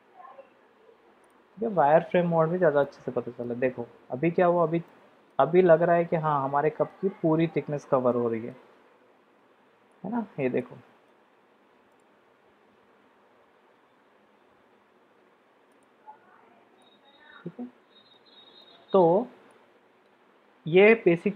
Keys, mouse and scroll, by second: 1.3 click, 2.3 shift+z, 2.8-3.4 drag, 4.8 click, 5.5-6.9 middle drag, 8.1-8.5 middle drag, 9.5 shift+z, 9.9-10.4 middle drag, 10.6-11.1 shift+middle drag, 15.9 middle click, 16.8-18.2 middle drag, 18.6-19.0 shift+middle drag, 19.5-20.1 middle drag.